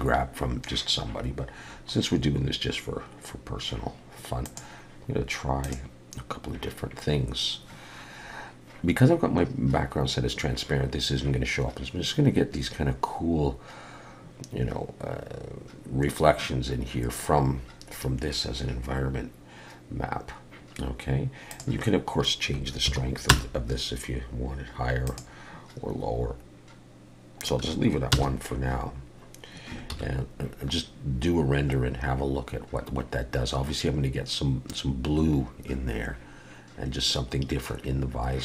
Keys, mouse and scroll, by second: 21.5 click, 25.1 click, 30.0 ctrl+s.